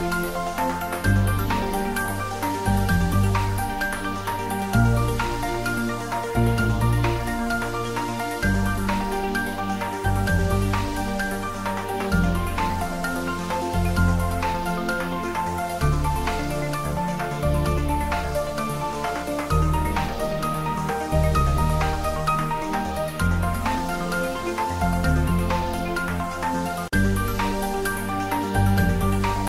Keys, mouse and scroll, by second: 1.0 click, 2.1-2.6 scroll down 1, 4.4 click, 5.2 ctrl+middle click, 5.6 shift+middle click.